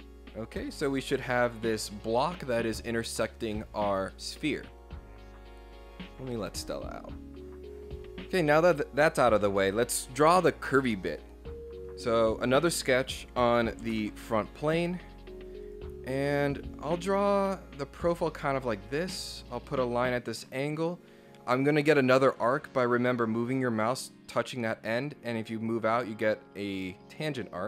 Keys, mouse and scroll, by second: 12.2 click, 12.8 click, 13.9 ctrl+8, 15.7 click, 16.6 scroll up 1, 18.9 click, 20.5 click.